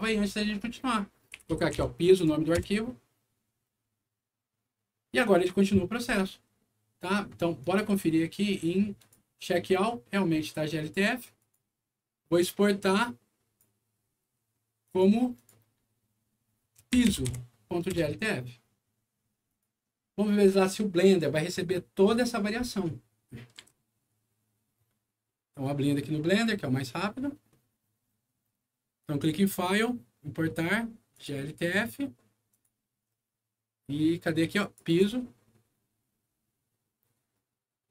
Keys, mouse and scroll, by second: 1.0-2.2 typing, 2.5 Return, 5.3 click, 7.5 click, 8.9 click, 11.4 click, 13.0 click, 14.8 click, 15.3 click, 16.7-17.7 typing, 17.9 Return, 19.5 click, 25.5 click, 29.0 click, 31.1 click, 32.5 click, 33.1 scroll down 1, 34.6 click, 34.8 click.